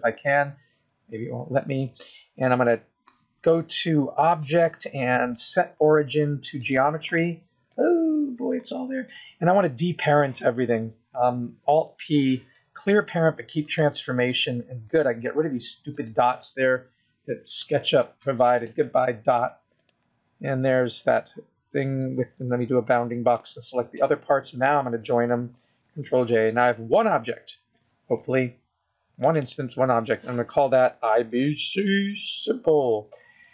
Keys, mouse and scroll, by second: 1.5-2.1 scroll down 2, 4.6 click, 7.8-8.2 scroll down 2, 8.0 middle click, 11.9 alt+p, 16.2 click, 17.8 x, 20.0 click, 22.8 b, 26.0 ctrl+j, 29.5 click, 29.7 click.